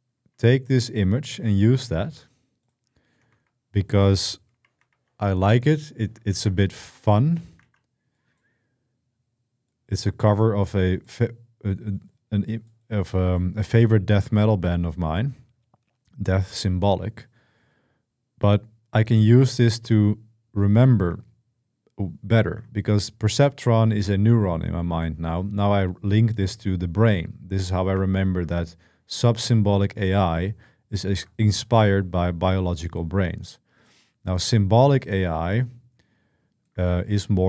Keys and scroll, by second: 3.1 super+2, 4.3 super+1, 4.6 super+2, 6.1 ctrl+v, 7.4 ctrl+v.